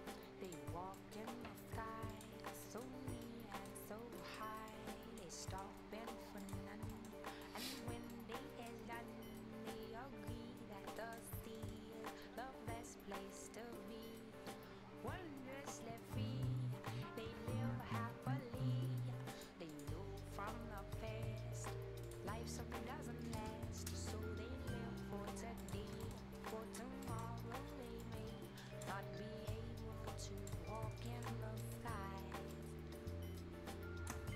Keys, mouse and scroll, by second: 0.4 shift+click, 0.8 shift+scroll down 1, 0.9 shift+right click, 2.1 shift+click, 2.4 shift+scroll up 1, 2.6 shift+right click, 3.0 shift+scroll up 1, 3.2 right click, 3.7 shift+scroll down 1, 4.2 shift+right click, 4.7 shift+click, 5.4 shift+right click, 6.4 shift+click, 6.7 shift+scroll up 1, 6.9 shift+right click, 7.2 shift+scroll up 1, 7.4 shift+right click, 7.9 shift+scroll up 1, 8.1 shift+right click, 9.1-9.5 shift+scroll up 1, 10.4 shift+scroll down 1, 10.7 shift+scroll up 1, 11.0 shift+right click, 11.2 shift+scroll down 1, 11.5 shift+middle click, 19.3 shift+click, 21.6 shift+click, 22.4 shift+scroll down 1, 23.4 shift+Return, 23.6 shift+scroll down 1, 24.2-25.3 shift+scroll up 2, 25.6 click, 25.8 shift+scroll down 1, 26.0 shift+right click, 26.2 scroll up 1, 26.5 click, 26.9 scroll down 1, 27.0 right click, 27.3-28.0 scroll up 1, 28.0 click, 29.0 scroll up 1, 29.5 click, 30.6 scroll up 1, 31.1 right click, 31.3 scroll up 1, 31.6 right click, 32.5 shift+click.